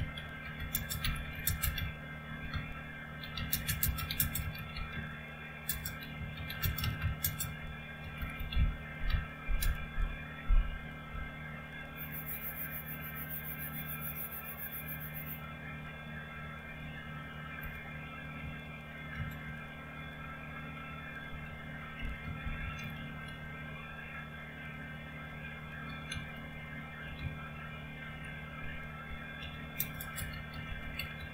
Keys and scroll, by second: 0.0-10.1 typing, 16.6 ctrl+o, 17.6 Return, 19.1 ctrl+x, 21.4-23.4 typing, 25.6-28.0 typing, 29.2-31.3 typing.